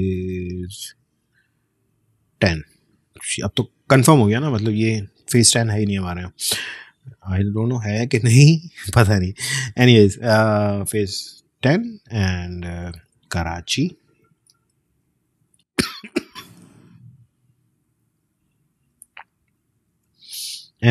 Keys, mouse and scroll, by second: 0.0-1.1 typing, 2.3 shift+x, 11.7 Return, 13.0-15.2 typing, 19.3 typing, 19.9 Return.